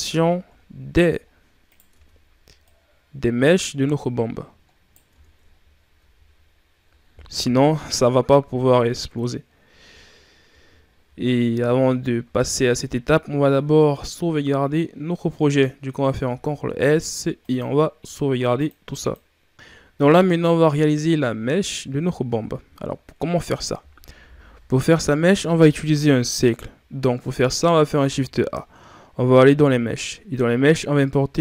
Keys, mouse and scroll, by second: 0.4-0.8 ctrl+scroll up 1, 0.8 ctrl+scroll down 3, 1.2 scroll up 4, 1.5 right click, 1.8 Tab, 2.5 right click, 5.0 Tab, 5.4 ctrl+scroll down 1, 5.8 a, 6.1 scroll down 2, 7.2 KP_1, 10.7 shift+scroll up 4, 11.6-13.5 shift+scroll up 6, 13.5-13.9 scroll up 2, 19.8 ctrl+scroll down 2, 20.1 shift+scroll up 1, 22.1-22.8 scroll down 4, 24.0 Delete, 27.9 shift+a.